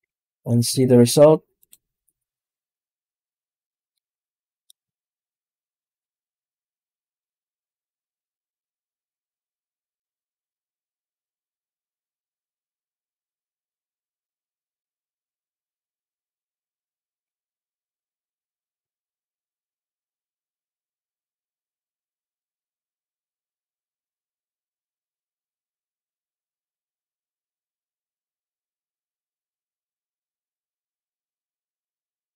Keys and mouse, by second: 0.0 ctrl+space, 0.6 z, 3.7 middle click, 5.9 click, 10.3-14.1 drag, 14.7 middle click, 16.1-19.8 drag, 21.4 middle click, 23.6-25.5 drag.